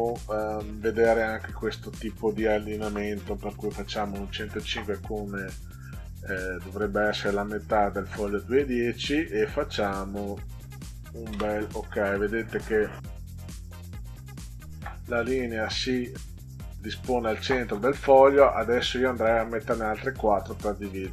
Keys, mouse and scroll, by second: 2.8 0, 4.0 5, 6.0 click, 11.3 Return, 14.3 click, 15.8 click.